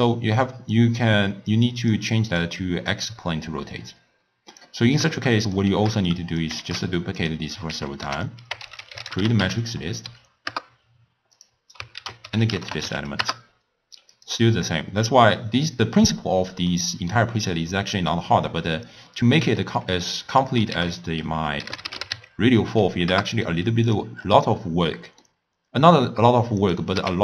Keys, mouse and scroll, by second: 0.1 click, 0.8-2.6 drag, 2.9-5.1 drag, 6.1 shift+d, 6.9 shift+d, 7.7 ctrl+a, 12.0 ctrl+a, 15.4-18.3 middle drag, 18.3 scroll down 1, 18.4-18.7 scroll up 1, 18.7 scroll down 1, 18.8 scroll up 1, 19.1-19.6 scroll down 1, 19.6-20.8 middle drag, 20.8 ctrl+a, 24.2-24.9 scroll up 6, 24.9 middle click, 25.6 scroll down 1, 26.6 click.